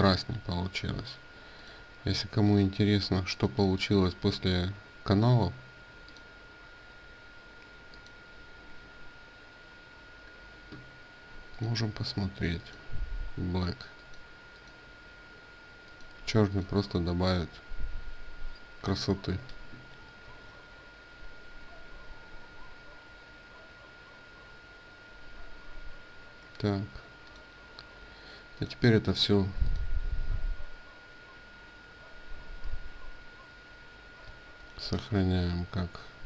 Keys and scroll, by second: 20.0 ctrl+w, 34.3 ctrl+shift+s.